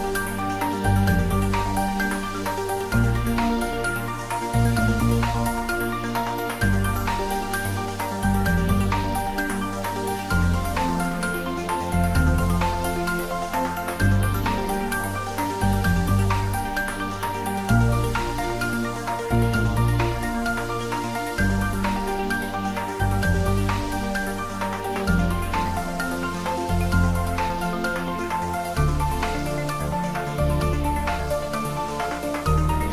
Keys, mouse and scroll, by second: 1.2 shift+click, 9.0 click, 10.0 click, 11.5 click, 13.9 click, 17.1 click, 20.1 click, 24.3 click, 28.3 click.